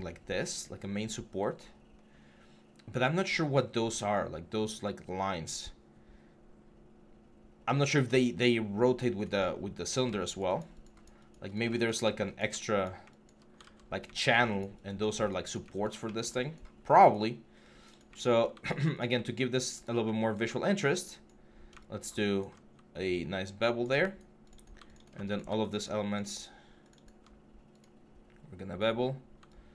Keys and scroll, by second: 9.3 6, 13.4 ctrl+z.